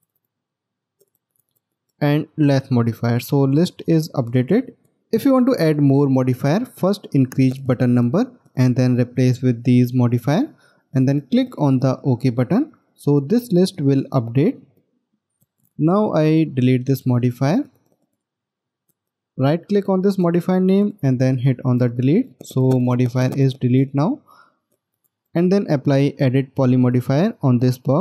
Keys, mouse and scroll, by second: 15.1 middle click, 19.2 right click.